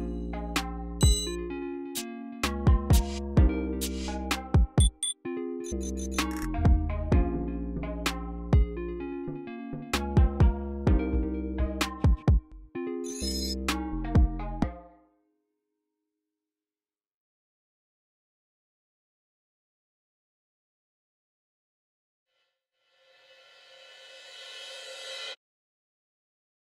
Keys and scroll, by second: 0.0-9.2 typing, 11.1-13.0 typing, 14.3 space, 22.2 a, 23.2-23.9 typing, 26.2 typing.